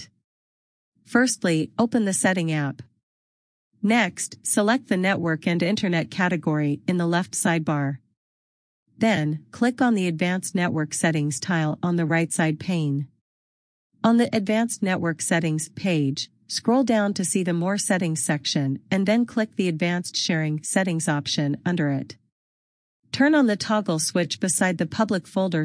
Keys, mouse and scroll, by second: 5.2 scroll down 1, 10.8 click, 20.2 click.